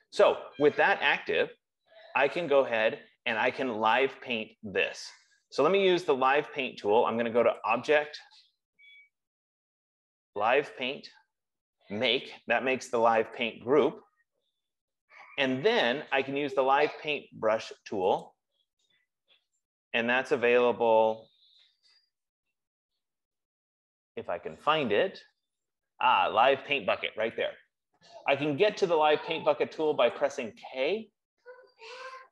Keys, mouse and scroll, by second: 8.0 click, 12.6 F15, 13.8 click, 18.7 click, 21.2 scroll down 1, 21.8-22.4 scroll, 23.5 scroll, 30.5 click.